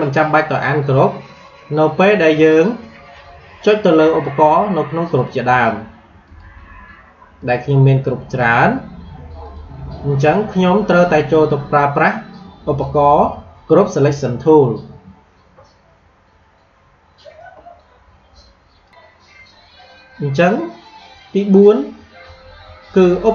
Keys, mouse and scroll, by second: 1.3 click, 5.1 click, 18.8 click.